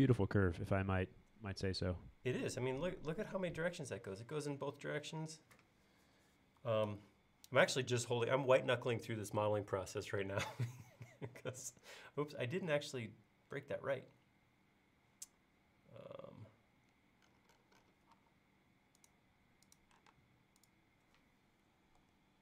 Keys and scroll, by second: 18.2 l, 20.2 space, 22.0 BackSpace.